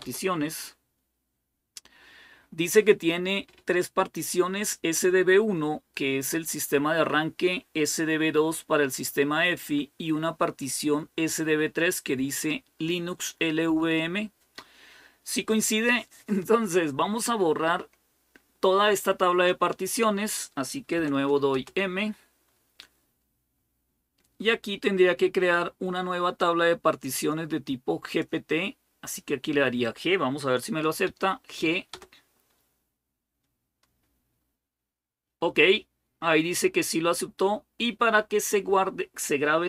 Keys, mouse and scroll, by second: 20.7-21.3 typing, 26.9-28.4 drag, 29.6 click, 30.8 g, 31.7 Return.